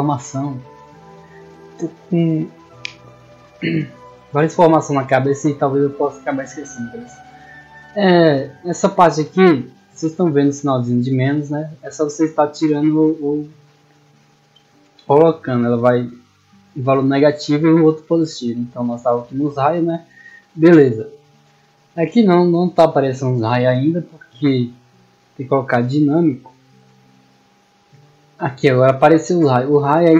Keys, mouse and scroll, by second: 8.7 click, 10.3 click, 18.6-24.7 middle drag, 24.7 click, 25.3 click.